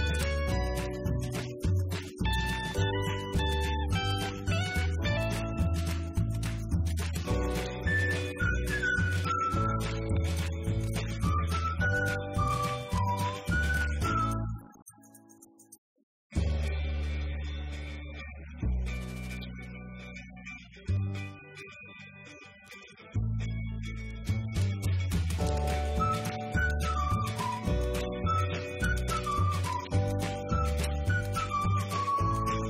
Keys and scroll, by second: 3.9 ctrl+c, 4.1 ctrl+v, 5.9 Down, 6.1 Up, 7.5 F2, 9.5-10.9 typing, 11.9 BackSpace, 13.4 s, 14.6 BackSpace, 15.0 h, 15.2 space, 24.9 -, 25.9-30.2 typing, 31.3 Return.